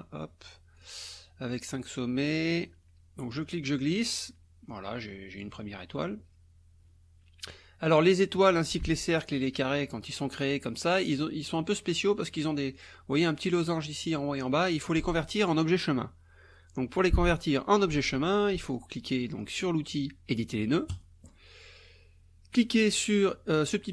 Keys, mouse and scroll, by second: 0.8 click, 3.3-5.6 drag, 12.8 click, 20.9 click.